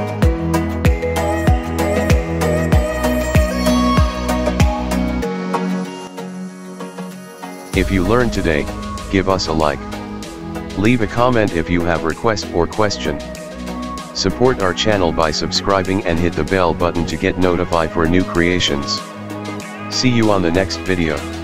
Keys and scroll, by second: 7.8-12.5 typing, 13.8 space, 14.8 s, 15.9 a, 16.6 d, 20.3 Escape.